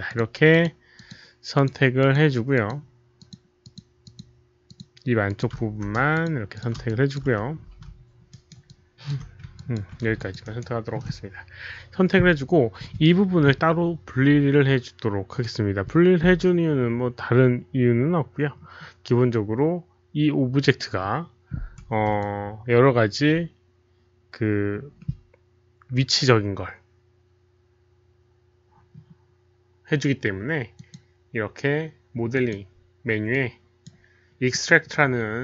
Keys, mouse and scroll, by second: 0.0 shift+click, 0.5 shift+click, 0.9 shift+click, 1.5 shift+click, 1.9 shift+click, 2.5 shift+click, 3.1 shift+click, 3.6 shift+click, 4.0 shift+click, 4.6 shift+click, 5.2 shift+click, 6.1 shift+click, 6.5 shift+click, 6.8 alt+shift+click, 7.8 alt+f, 8.2 alt+right click, 8.4 alt+f, 8.6 alt+shift+click, 9.5 ctrl+click, 10.1 alt+shift+click, 10.4 alt+right click, 11.8 alt+right click, 11.8 shift+click, 11.8 f, 12.7 alt+right click, 12.7 shift+click, 12.7 f, 18.5-19.0 scroll down 1, 22.1 alt+click, 24.9 alt+click, 29.0 alt+click, 30.7 alt+click, 32.3 alt+click, 33.2 click, 34.5 click.